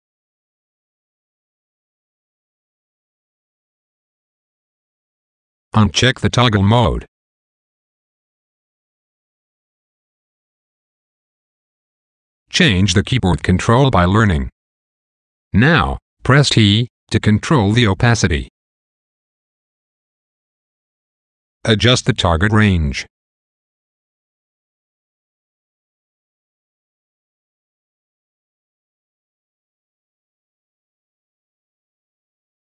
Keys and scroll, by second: 0.7 a, 3.0 a, 4.8 a, 6.7 a, 9.7 a, 15.7 t, 17.6 t, 23.7 t, 24.9 t, 27.7 t.